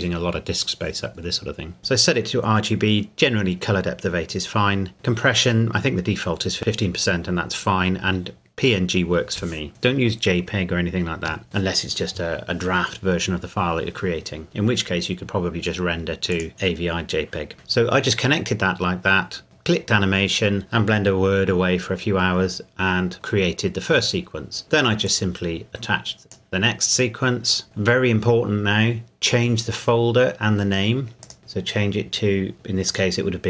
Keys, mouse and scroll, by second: 16.3 click, 19.4 scroll up 1, 25.0 click, 31.2 click, 32.9 click.